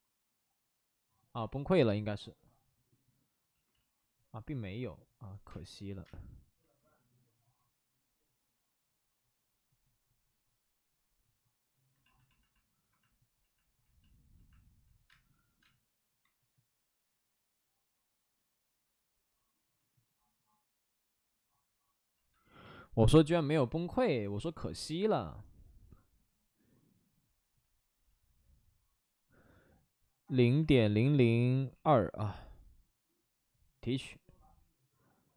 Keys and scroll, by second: 3.7 ctrl+z, 5.4 space, 6.0 space, 15.0 space, 15.6 space, 30.2 0, 30.5 ., 31.0 0, 31.7 2, 31.8 Return.